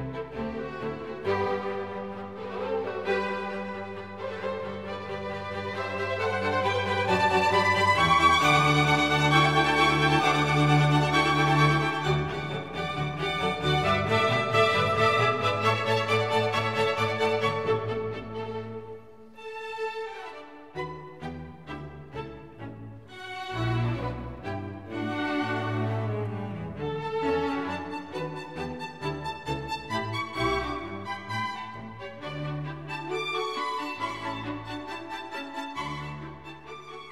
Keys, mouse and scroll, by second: 7.9-15.8 drag, 16.0 middle click, 16.2-19.8 drag, 19.8 r, 22.3 r, 26.8-28.2 drag, 28.2 r, 32.0-36.2 drag, 36.6-37.1 drag.